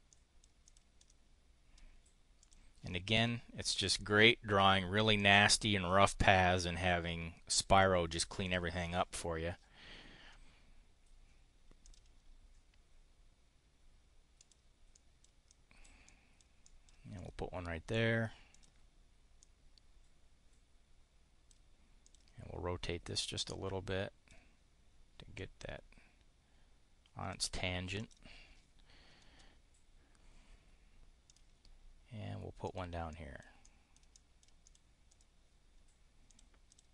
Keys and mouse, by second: 0.6 click, 1.0 click, 2.4 click, 3.6 click, 5.2 click, 6.9 click, 8.3 click, 11.8 click, 14.4 click, 14.9 click, 15.4 click, 16.0 click, 16.5 click, 17.1 click, 18.5 click, 19.4-21.6 drag, 22.0 click, 23.0-24.4 drag, 25.4-27.4 drag, 27.9 click, 31.2 click, 32.6 click, 33.1 click, 33.6 click, 34.1 click, 34.6 click, 35.1 click, 36.2 click, 36.7 click.